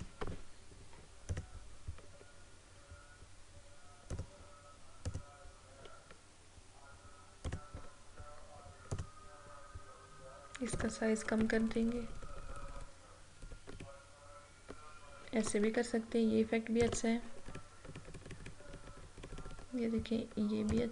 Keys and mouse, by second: 0.0 click, 4.2 click, 7.5 click, 11.3 Down, 16.9 click, 17.4 Up, 20.7-20.9 drag.